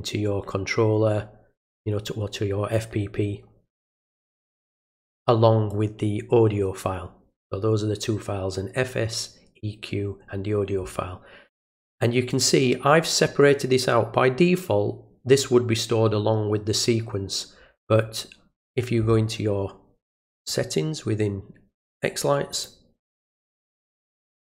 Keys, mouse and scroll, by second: 12.3 click, 20.4 click, 22.5 click.